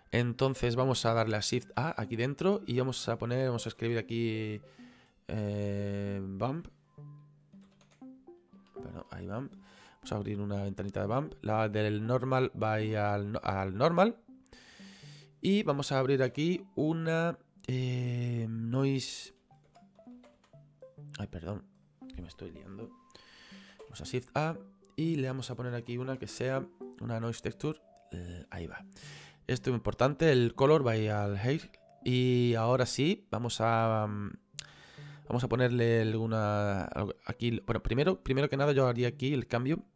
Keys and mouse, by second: 1.8 shift+a, 3.7 b, 3.8 u, 4.0 m, 5.3 click, 7.6 b, 7.7 u, 7.9 m, 8.6 BackSpace, 10.3 click, 12.5 click, 14.5 middle click, 16.3 shift+a, 19.4-20.4 typing, 21.1 click, 21.3 right click, 21.8 click, 22.7 Delete, 23.7 shift+a, 24.7 click, 25.7-26.4 typing, 27.4 click, 30.2 click, 38.3 click, 39.5 click.